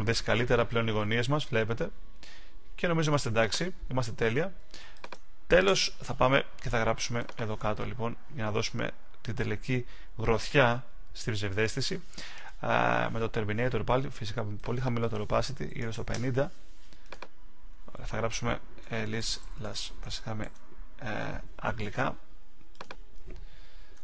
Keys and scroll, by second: 20.4 super+a.